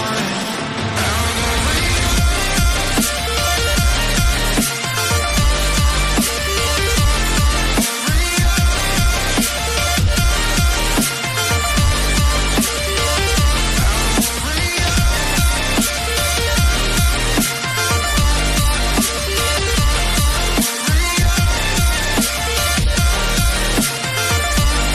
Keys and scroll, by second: 1.9 ctrl+g, 2.0 Down.